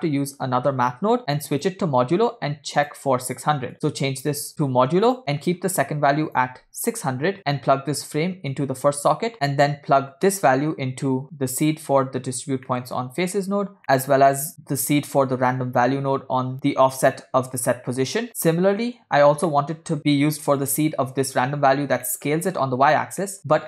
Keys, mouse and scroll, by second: 3.3 click, 3.7-5.2 drag, 5.2 middle click, 5.4-6.3 scroll up 5, 6.4 click, 7.4 0, 8.6-9.3 drag, 9.3 middle click, 9.3 scroll down 3, 10.4 drag, 10.5-12.6 drag, 12.8 middle click, 13.1-13.4 scroll up 4, 13.7 scroll down 2, 13.8 middle click, 14.6-16.5 drag, 16.5 middle click, 16.6 scroll up 2, 17.6 click, 18.3 scroll down 2, 18.6 middle click, 19.6 middle click, 19.9 scroll up 2, 20.6 click, 22.1 middle click, 23.3 middle click, 23.4 scroll down 2.